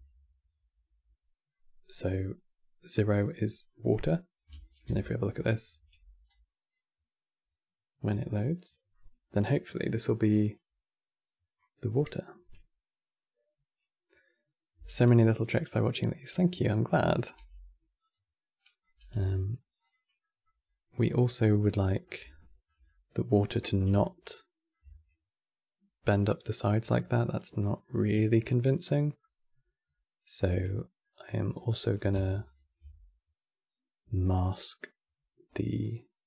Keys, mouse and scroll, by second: 1.2-4.3 middle drag, 4.3 ctrl+shift+click, 4.7-7.3 middle drag, 7.3 click, 16.4 click, 17.0 g, 18.3 click, 18.7 g, 19.9-21.1 middle drag, 21.1-21.5 scroll up 4, 21.9 scroll up 2, 22.0-31.2 shift+middle drag, 31.2 click, 32.1 ctrl+shift+click.